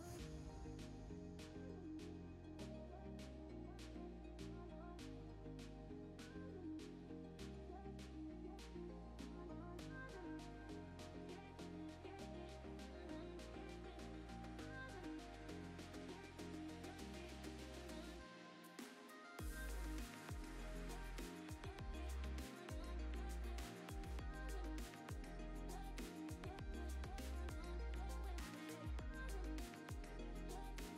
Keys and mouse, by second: 12.7 g, 13.4-30.9 drag.